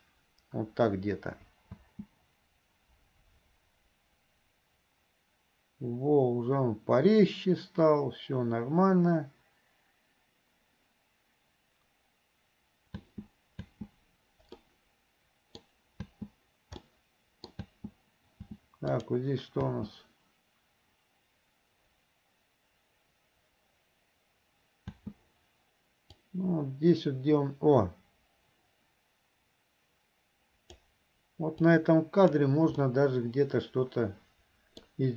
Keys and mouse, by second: 1.9 space, 13.2 space, 14.7-15.7 middle drag, 16.9 middle click, 19.2 click, 25.0 space, 26.4-30.9 drag, 31.7 click, 32.9-34.9 middle drag.